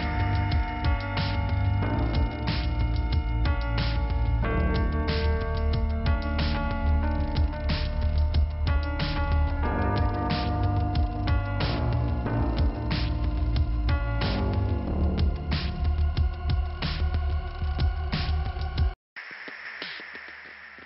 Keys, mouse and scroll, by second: 0.7 click, 0.8 click, 1.9 scroll up 2, 3.5 click, 5.3 click, 7.3 click, 7.4 click, 7.9 scroll up 2, 8.3 click, 8.5 click, 9.5 click, 10.2 click, 12.2 click, 12.3 click, 13.8 click, 15.7 click, 17.1 click, 17.2 click, 18.6 click, 20.0 click.